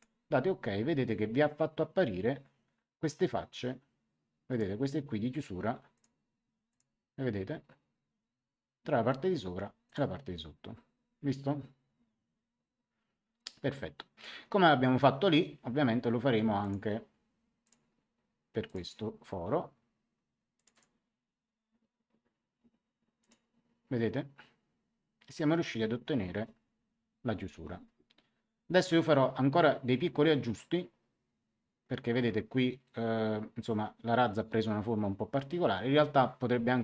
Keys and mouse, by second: 4.4 click, 5.9 click, 9.8 click, 16.5 click, 17.6 click, 18.6 click, 20.5 click, 23.1 click.